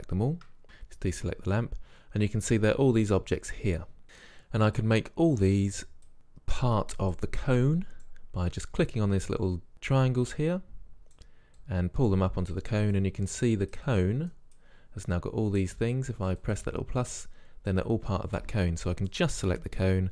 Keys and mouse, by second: 0.6-2.3 drag, 4.0 ctrl+z, 4.8-9.5 drag, 10.0-16.2 drag, 16.5-18.2 drag, 19.1-19.9 right drag.